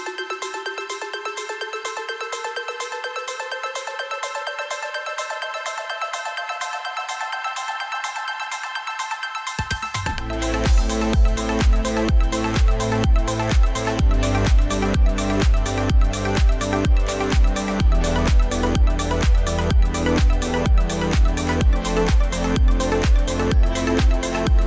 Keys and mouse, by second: 0.3 z, 2.9 KP_8, 4.2 Return, 6.6 click, 7.6 KP_4, 8.0 KP_4, 8.5 KP_4, 8.8 KP_4, 9.8-11.8 typing, 15.6 right click, 17.9 e, 20.7 z, 22.1 KP_8, 23.1 Return.